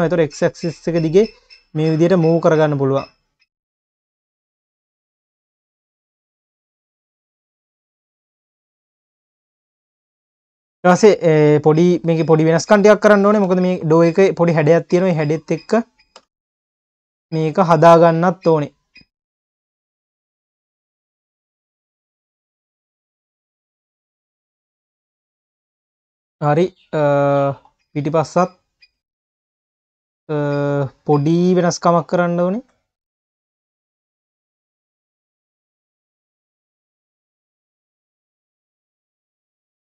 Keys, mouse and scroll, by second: 3.8 scroll down 1, 4.0 q, 6.7 scroll down 1, 6.9 q, 7.6-7.9 scroll up 2, 7.9 q, 8.7 click, 9.3 scroll up 1, 9.5 q, 10.4 KP_1, 12.1 click, 13.4 KP_1, 14.4 click, 15.1 Tab, 16.2 1, 16.9 click, 17.4-18.2 scroll up 2, 18.2 click, 18.9 click, 19.6 click, 20.1-20.6 scroll up 2, 20.6 click, 23.9-24.2 drag, 24.2 scroll down 1, 24.5 Tab, 24.9 ctrl+s, 25.1 click, 25.4 scroll down 2, 25.7 q, 27.5-27.9 scroll down 3, 28.3-28.9 scroll down 9, 28.9 q, 29.4-29.8 scroll up 2, 29.8 q, 30.6 click, 31.0 Tab, 31.7 click, 32.5 shift+click, 33.0 q, 33.1-33.9 scroll up 1, 33.9 click, 35.3 click, 35.8 q, 36.8 shift+click, 37.9 click, 39.1 Tab, 39.3 click, 39.6 ctrl+s.